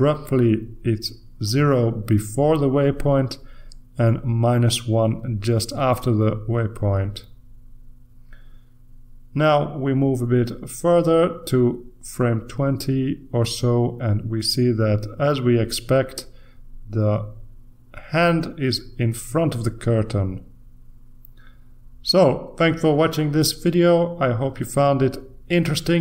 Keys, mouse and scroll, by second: 0.9-1.8 scroll up 1, 3.2 click, 4.5 click, 8.3 click, 12.1 click, 13.3 click, 15.1 click, 24.5 ctrl+s.